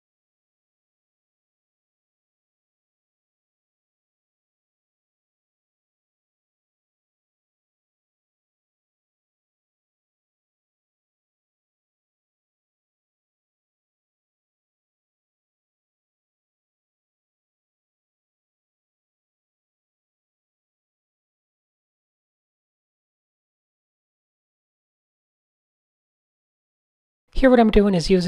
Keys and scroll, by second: 0.0-1.8 typing, 2.8-4.6 typing, 5.0 shift+super+a, 5.3 super+0, 5.5 Tab, 6.0 Tab, 6.0 `, 7.2-8.7 typing, 13.2-16.9 typing, 16.6 Tab, 17.4 super+z, 18.6 Tab, 21.3-23.3 typing, 23.3 Tab, 23.9 super+z, 24.6 super+z, 25.1 super+z, 25.1 Tab, 26.8 super+z, 27.3 super+z, 27.7 a.